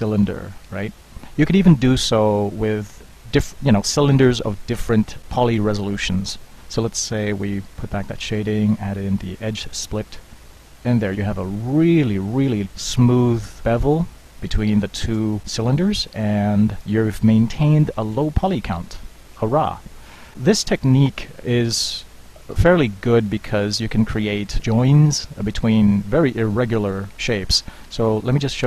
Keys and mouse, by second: 7.4-10.4 drag, 10.4-13.0 middle drag, 15.7-16.5 middle drag, 17.2 middle click, 17.6 z, 21.0 Tab, 22.5 z, 22.9 Tab.